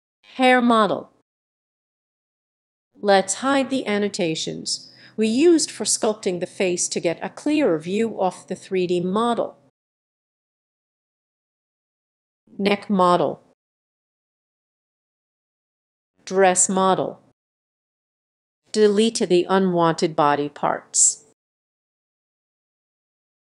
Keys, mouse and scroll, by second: 0.5 click, 0.9-1.5 typing, 3.3 click, 7.1 click, 8.2 click, 9.0 click, 9.4 click, 9.7 click, 11.2 click, 12.4 click, 12.7-13.4 typing, 13.9 scroll, 14.5 click, 15.9 click, 16.4 typing, 17.5 click, 18.6 Delete, 18.9 click, 19.5 Delete, 19.7-20.8 scroll down 4, 20.8 click, 21.0 Delete, 21.5 click, 21.8 Delete, 22.2-22.8 scroll up 7.